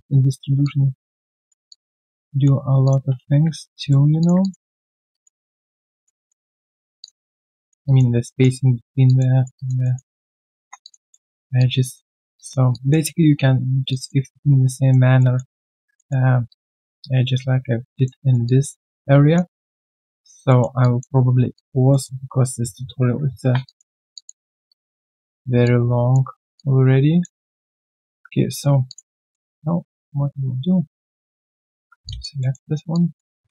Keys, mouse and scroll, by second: 1.6 alt+click, 2.3 alt+middle click, 3.6 right click, 4.0 q, 4.4 alt+click, 4.8 alt+middle click, 5.0 alt+scroll down 1, 5.1 alt+click, 5.4 right click, 6.2 alt+click, 6.5 alt+middle click, 6.7-7.5 alt+scroll down 1, 7.5 alt+scroll down 3, 7.6 alt+middle click, 7.8 alt+click, 8.1 alt+right click, 8.3 alt+click, 9.3 alt+right click, 9.5 alt+click, 9.8 alt+middle click, 10.1 alt+right click, 10.6 1, 10.8 alt+click, 11.1 alt+middle click, 11.3 alt+right click, 11.6 alt+click, 12.1 alt+scroll down 1, 12.3 alt+click, 13.9 alt+click, 15.1 alt+middle click, 15.5 alt+click, 15.9 alt+middle click, 16.4 alt+click, 17.6 alt+scroll down 1, 17.9 alt+click, 18.2 alt+right click, 18.4 alt+click, 19.5 alt+middle click, 20.2 alt+scroll down 1, 20.4 alt+middle click, 20.8 alt+click, 21.9 alt+middle click, 23.6 alt+click, 24.4 alt+right click, 24.6 alt+click, 25.2 alt+middle click, 25.6 alt+click, 26.3 alt+scroll down 1, 26.5 alt+click, 27.4 alt+right click, 27.6 alt+middle click, 27.9 alt+right click, 28.3 right click, 28.8 alt+click, 29.2 alt+middle click, 29.6 Tab, 32.0 alt+click, 32.4 alt+middle click, 32.6 alt+right click, 32.9 alt+click, 33.2-33.5 typing.